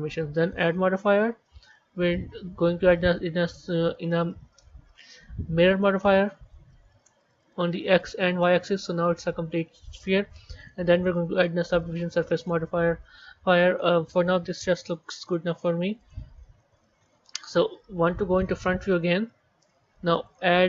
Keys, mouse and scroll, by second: 0.4-3.5 drag, 7.8 click, 8.3-10.5 middle drag, 10.5 click, 10.8-13.9 drag, 15.1 click, 15.9 click, 16.6-17.6 middle drag, 17.6 KP_1, 18.3-20.1 scroll down 3, 20.1 click.